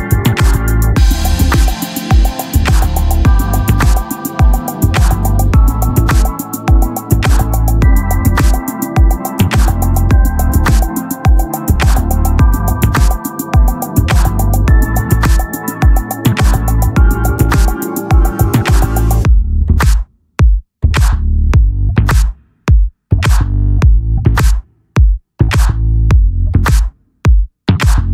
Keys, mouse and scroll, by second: 0.3 Tab, 1.1-4.1 drag, 4.1 Tab, 5.8 ctrl+r, 5.9 KP_3, 7.8 z, 8.8 c, 8.9 z, 9.2 c, 10.1 click, 10.5 c, 12.1 click, 12.5 c, 13.6 click, 15.4 z, 15.4-17.2 right drag, 16.3-17.6 drag, 17.6 e, 19.3-20.5 drag, 20.5-22.4 middle drag, 21.8-23.2 right drag, 22.4 ctrl+r, 23.2-24.5 drag, 24.0 ctrl+z, 24.5 right click, 25.5 g, 26.7 Tab, 27.8 KP_3.